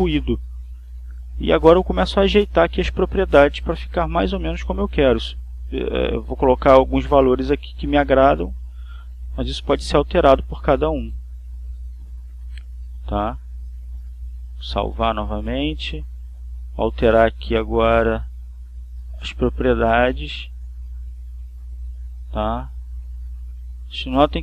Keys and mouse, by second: 3.3 click, 6.8 1, 7.4 6, 7.6 Return, 9.1 click, 10.8 click, 11.7 click, 14.6 click, 15.7 click, 19.6 click, 20.6 click, 22.0 2, 22.4 Return, 23.3 2, 23.6 Return.